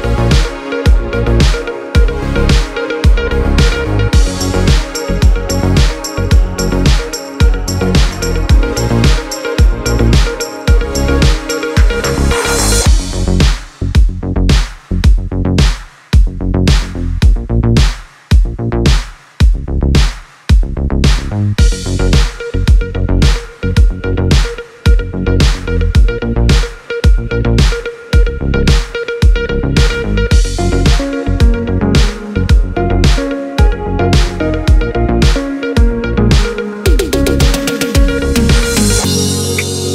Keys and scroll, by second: 31.3 alt+[, 32.4 alt+].